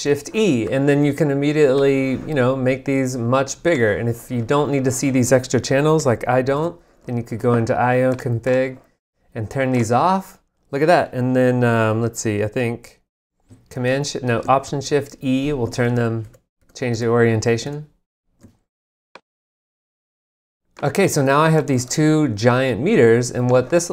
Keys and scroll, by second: 6.5 alt+a, 13.7 shift+super+e, 14.4 alt+shift+super+e, 14.9 alt+shift+e, 15.8 alt+shift+e.